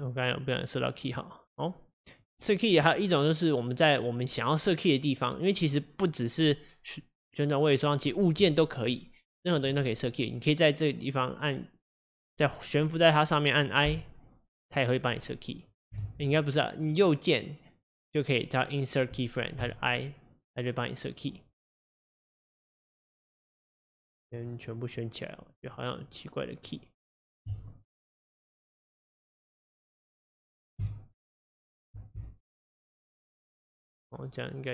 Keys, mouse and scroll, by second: 16.1 ctrl+z, 19.7-21.3 right drag, 23.4 shift+click, 24.4 shift+click, 24.7 shift+click, 25.0 shift+click, 25.6 shift+click, 26.0 shift+click, 26.7 shift+click, 27.5 a, 30.2-32.9 drag, 32.9 x, 33.6-34.7 drag.